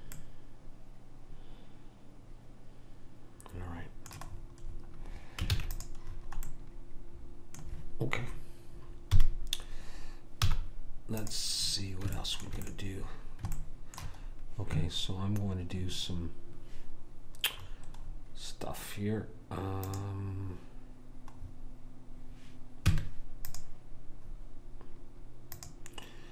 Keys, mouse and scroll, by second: 0.2-2.1 middle drag, 5.6 ctrl+s, 9.2 KP_1, 10.5 z, 11.7-17.6 middle drag, 20.0 click, 23.0 Tab, 25.6 click.